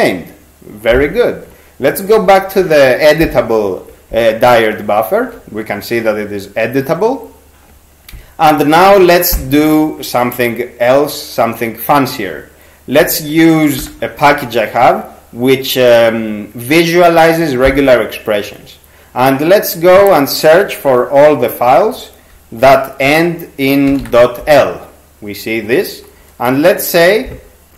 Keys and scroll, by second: 2.2 ctrl+x, 2.6 ctrl+q, 13.0 ctrl+c, 13.8 r, 22.6-24.5 typing.